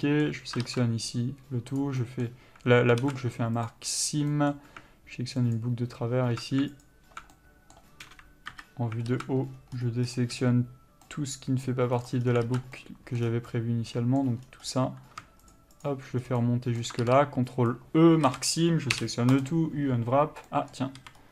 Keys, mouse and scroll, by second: 2.0 ctrl+e, 2.3 middle click, 3.2 alt+a, 3.8 click, 4.6 middle click, 5.8 alt+click, 7.6 middle click, 8.3 KP_3, 8.8 KP_7, 9.3 alt+z, 9.7 scroll up 1, 11.3 c, 12.2 middle click, 12.5 scroll down 1, 12.7 alt+z, 13.0 middle click, 13.4 scroll down 1, 13.7 middle click, 14.7-15.8 scroll down 1, 15.8 shift+click, 16.5 scroll down 1, 16.6 middle click, 17.9 ctrl+e, 18.5 a, 19.7 u, 20.7 middle click, 21.2 a.